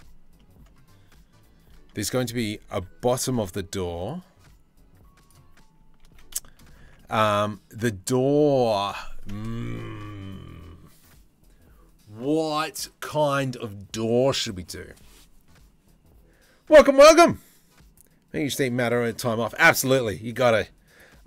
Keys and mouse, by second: 0.0 middle click, 2.3 ctrl+r, 5.6 ctrl+z, 6.0 shift+middle click, 6.5 Tab, 6.6-7.4 middle drag.